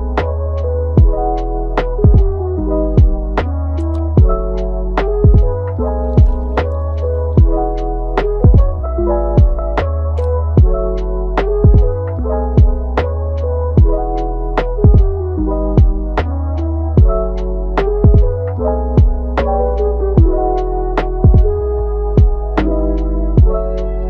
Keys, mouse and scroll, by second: 0.4-1.4 middle drag, 1.4 g, 2.8-3.2 scroll down 2, 3.2-6.2 middle drag, 8.3 scroll down 1, 8.6 middle click, 9.0-9.4 scroll up 5, 9.4-11.7 middle drag, 11.7-13.4 drag, 13.8 scroll up 2, 14.2-15.6 middle drag, 15.6-18.2 drag, 18.2-18.5 scroll down 2, 18.5-19.2 middle drag, 19.2 scroll down 1, 19.4-20.0 middle drag, 20.0-20.6 scroll up 1, 20.6-21.1 scroll up 1, 21.1 shift+click, 21.6 shift+click, 22.1-23.3 middle drag, 23.3 shift+click.